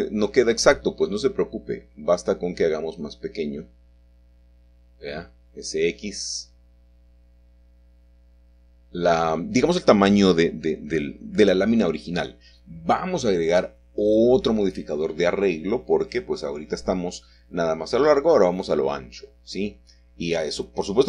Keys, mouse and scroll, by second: 0.2 middle click, 2.8 s, 7.5 shift+click, 9.4 middle click, 9.4-9.8 scroll down 1, 12.7-16.5 scroll up 1, 16.5 click, 17.5 click, 19.4-20.9 drag.